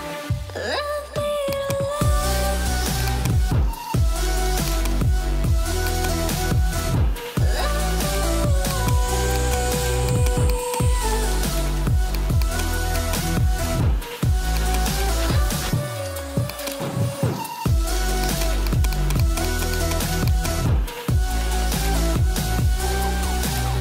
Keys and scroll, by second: 6.3 [, 8.1 ], 12.5 ], 15.5 [, 23.1 ].